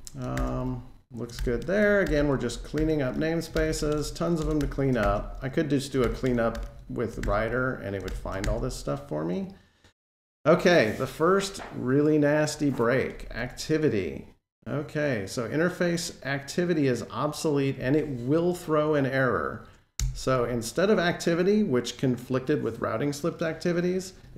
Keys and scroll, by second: 2.6 alt+shift+Page_Down, 3.4 super+x, 5.8 alt+shift+Page_Down, 5.9 super+x, 7.0 alt+shift+Page_Down, 7.9 super+x, 8.2 alt+shift+Page_Down, 20.2 alt+super+Right.